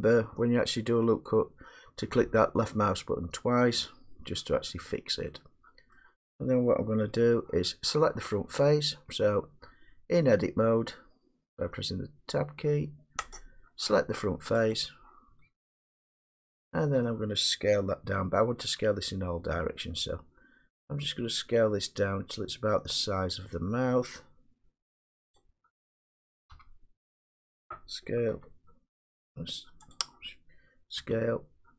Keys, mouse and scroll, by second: 3.8 click, 6.0-11.0 middle drag, 7.1 Tab, 9.1 Tab, 13.4 click, 14.8 click, 17.1 middle click, 18.6 s, 26.6 1, 28.3 s, 30.0 click, 31.0 s.